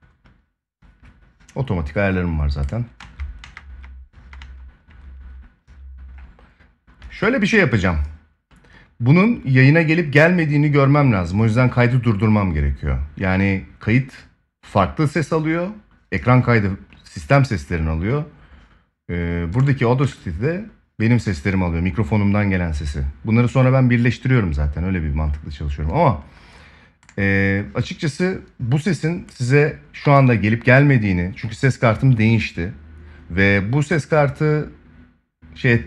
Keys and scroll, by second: 2.7 space, 29.7 ctrl+s.